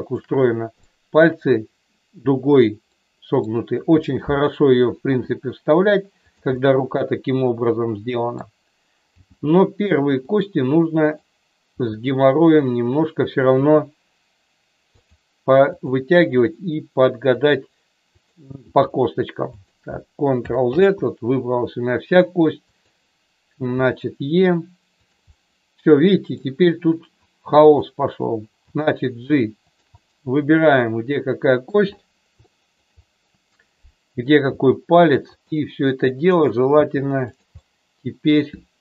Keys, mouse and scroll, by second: 0.8 shift+middle click, 2.9 middle click, 5.0 e, 6.5-8.4 middle drag, 9.1 g, 10.1 click, 11.0 click, 11.6 g, 12.4 click, 13.5 e, 14.9 click, 16.1 e, 17.4 click, 18.1 click, 18.6 e, 20.6 ctrl+z, 22.6 click, 23.7 e, 25.0 click, 25.3-26.4 middle drag, 27.6 click, 28.6 g, 29.6 click, 29.9-31.6 middle drag, 32.4 shift+middle click, 34.5 g, 35.3 click, 36.8 g, 37.1 click, 37.6 middle click.